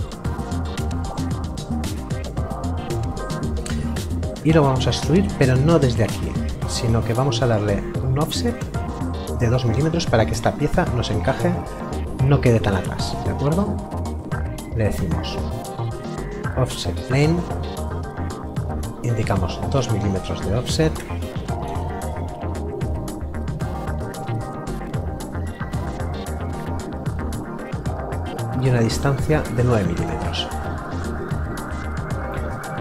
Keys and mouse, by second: 4.4 middle click, 13.5 click, 16.4 BackSpace, 17.8 click, 18.8 KP_Subtract, 19.0 KP_2, 26.2 click.